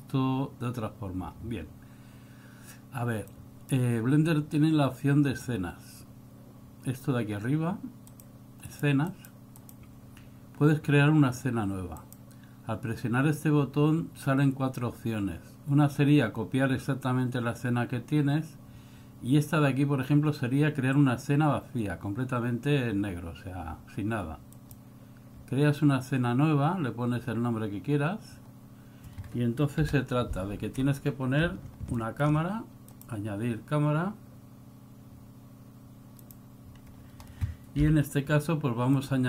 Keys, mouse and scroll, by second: 32.1 KP_7, 39.1 KP_3.